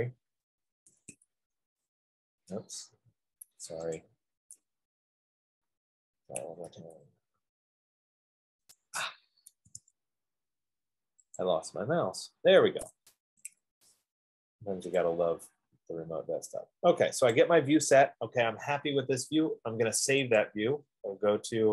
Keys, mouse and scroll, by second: 1.1-2.3 typing, 6.3-7.6 typing, 9.7 Escape, 9.9 Escape, 13.7-14.1 typing, 17.6 click, 20.7 click.